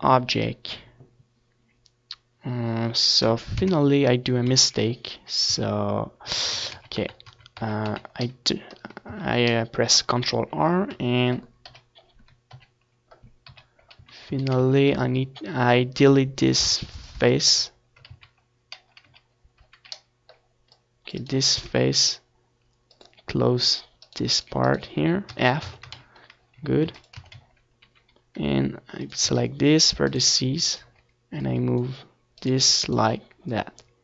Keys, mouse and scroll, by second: 0.5 z, 1.6 Tab, 2.5 ctrl+z, 2.7 ctrl+z, 2.9 ctrl+z, 3.2 ctrl+z, 3.4 ctrl+z, 3.6 ctrl+z, 4.0 ctrl+z, 5.2 Tab, 6.5 z, 7.7 KP_1, 8.5 ctrl+KP_1, 9.5 ctrl+KP_3, 9.9 z, 10.2 a, 10.5 c, 12.5-14.4 right drag, 12.7 x, 12.9 z, 13.8 ctrl+z, 14.8 c, 17.0-18.8 right drag, 17.0 x, 18.6-20.3 drag, 19.7 right click, 20.9 f, 21.2 Tab, 21.5 ctrl+s, 22.4 ctrl+s, 22.7 Tab, 24.5-26.1 drag, 24.7 a, 25.5 right click, 26.3-30.0 right drag, 26.8-28.5 drag, 28.8-30.0 drag, 30.0 Tab, 30.3 ctrl+s, 32.1-33.8 drag, 32.6 ctrl+s, 33.8 KP_7.